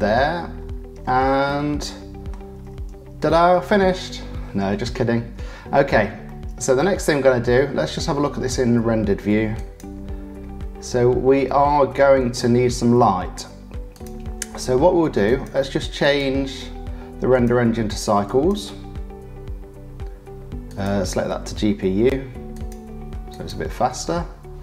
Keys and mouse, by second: 1.5 middle click, 3.3 middle click, 6.3-7.5 middle drag, 9.9 middle click, 13.9 middle click, 15.2 click, 16.0 click, 17.3-18.5 drag, 22.7 click.